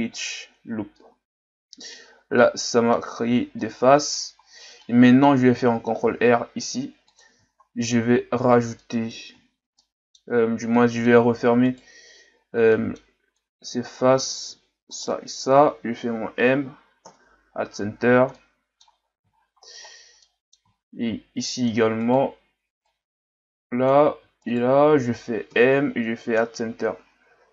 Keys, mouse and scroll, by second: 1.0-3.3 middle drag, 3.3 scroll down 1, 3.6-6.0 middle drag, 6.0 ctrl+r, 7.5-8.7 shift+scroll up 10, 8.8 middle click, 9.4-9.8 shift+scroll up 2, 9.8 middle click, 10.4-10.8 scroll up 1, 10.8 middle click, 11.7 right click, 12.7 middle click, 13.4 click, 14.9 shift+right click, 16.1 m, 17.9-18.4 scroll down 1, 18.4 middle click, 19.1 scroll down 2, 19.4-20.2 scroll up 8, 20.2 middle click, 20.7-21.5 scroll up 2, 21.5 middle click, 22.0 right click, 22.9 click, 24.4 shift+right click, 25.5 m, 27.3 Tab.